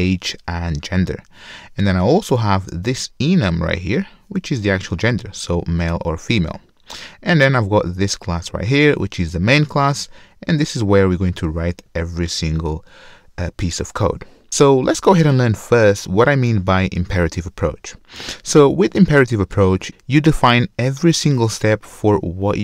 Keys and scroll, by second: 10.4 super+4, 12.1 super+1.